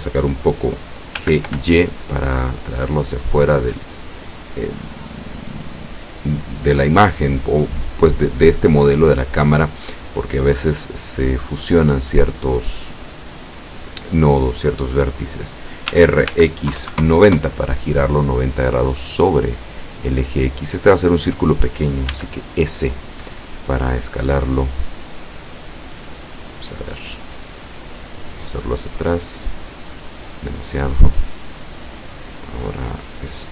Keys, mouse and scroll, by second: 1.3 g, 1.6 y, 3.8 click, 16.0 r, 16.4 x, 16.8 KP_9, 17.0 KP_0, 17.4 KP_Enter, 19.2-20.4 drag, 20.8 click, 22.2 s, 25.6 click, 26.2-27.0 middle drag, 27.7-29.8 drag, 30.3 click, 31.5-33.5 drag.